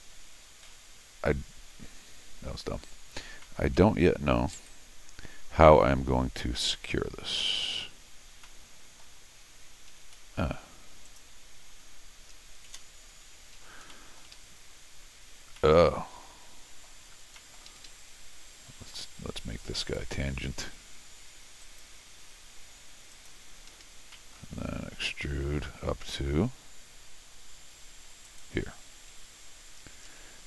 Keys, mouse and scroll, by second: 0.6 g, 3.4 middle click, 4.6 x, 8.4 middle click, 9.9 Escape, 10.1 Escape, 11.0 click, 13.5 Escape, 13.7 Escape, 13.9 middle click, 14.3 x, 15.6 middle click, 16.8 middle click, 17.2 scroll up 2, 17.3 middle click, 17.7 Escape, 17.8 Escape, 19.8 click, 21.6 ctrl+click, 23.1 click, 23.7 Escape, 23.8 Escape, 24.1 middle click, 28.2 click.